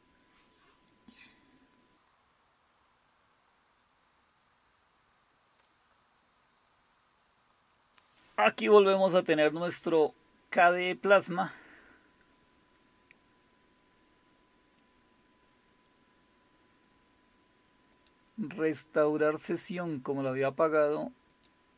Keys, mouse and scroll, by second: 7.7 click, 17.9 click, 21.3 click.